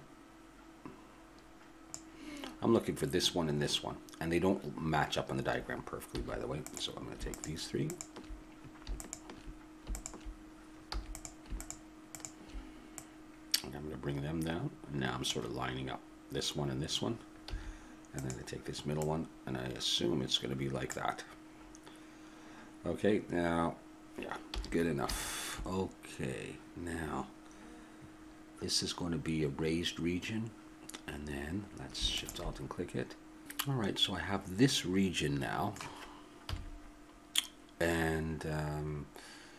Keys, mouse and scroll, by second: 6.2 a, 6.7-15.3 drag, 10.9 a, 17.5 a, 18.2-20.8 drag, 24.6 a, 24.8-27.7 middle drag, 32.1-33.8 drag, 33.4 x, 34.7-36.4 middle drag, 36.4 KP_7.